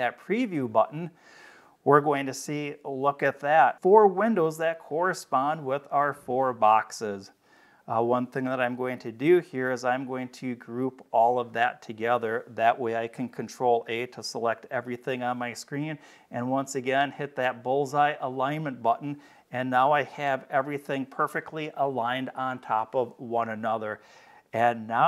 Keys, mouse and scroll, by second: 0.6 click, 6.4 click, 7.7-8.7 drag, 11.0 click, 12.1 click, 18.4 click, 24.3 click.